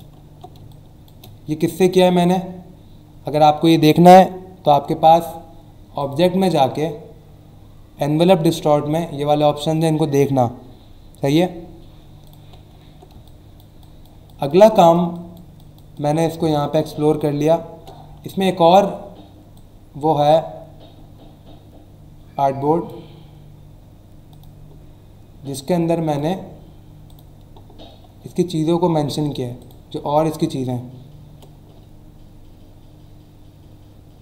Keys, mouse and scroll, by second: 0.2 alt+scroll up 1, 0.6 space, 0.7 click, 1.1 space, 1.8 click, 6.0 click, 12.2 click, 12.8 alt+scroll down 1, 13.1-15.7 typing, 13.2 click, 13.8 click, 14.2 click, 14.7 click, 15.1 click, 15.5 click, 17.6 ctrl+w, 18.3 alt+Tab, 19.5 click, 24.3 click, 26.0 click, 27.1 click, 29.6 click.